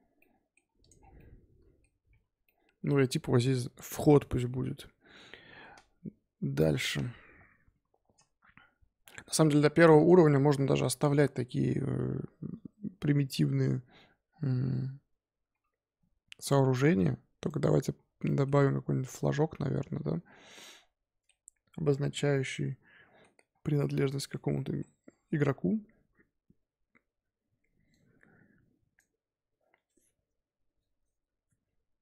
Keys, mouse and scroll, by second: 0.1-0.8 middle drag, 0.8 click, 0.9 scroll down 6, 1.1-2.2 middle drag, 2.2 KP_5, 2.4-3.6 middle drag, 3.6-5.5 scroll up 1, 9.3 click, 9.9 click, 10.3 scroll up 1, 10.5-11.0 scroll down 6, 11.0-14.1 scroll up 4, 15.5-17.2 scroll up 2, 17.2 scroll up 1.